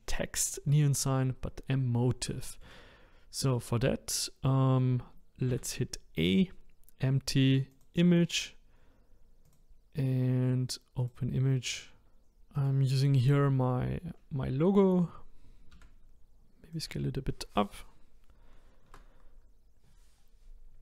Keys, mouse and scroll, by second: 2.4-5.5 shift+middle drag, 5.5 shift+a, 9.4 click, 11.0-12.0 drag, 12.6 click, 13.6-14.1 scroll up 2, 15.7 s, 18.9 KP_0, 19.8 scroll down 1.